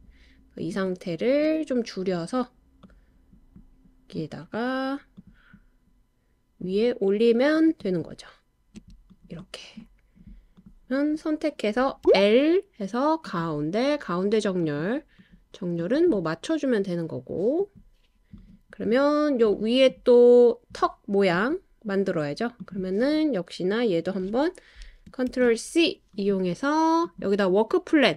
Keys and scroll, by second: 13.4 typing, 25.3 super+c.